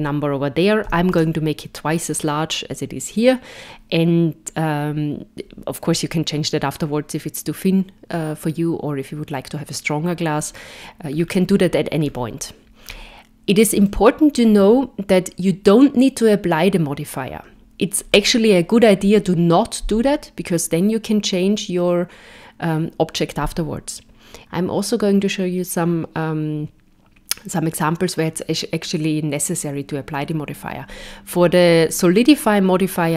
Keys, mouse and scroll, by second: 11.2-11.9 scroll down 3, 12.0-12.4 scroll down 4, 12.4 scroll up 1, 12.9-13.7 scroll down 1, 13.7 scroll down 1, 13.9 shift+middle click.